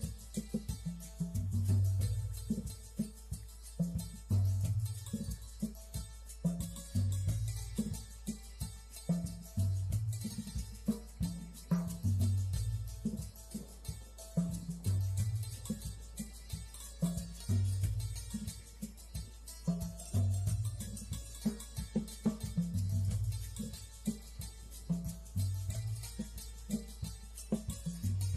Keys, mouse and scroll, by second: 0.2 click, 0.9 click, 2.7 click, 4.7 click, 7.3 middle click, 7.8 click, 8.7-9.7 drag, 11.1-12.6 drag, 14.2 click, 15.1-16.2 drag, 16.6 click, 18.5 middle click, 19.2 click, 20.2 click, 23.2 click, 23.7 shift+a, 24.3 click, 27.1 click, 27.5 click, 27.8 click.